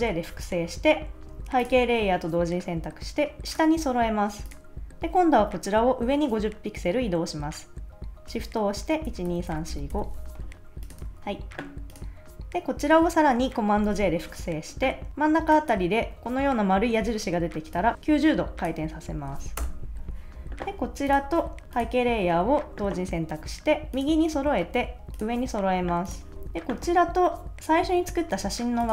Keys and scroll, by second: 9.1 shift+Up, 11.0 super+s, 13.8 super+j, 19.5 Return.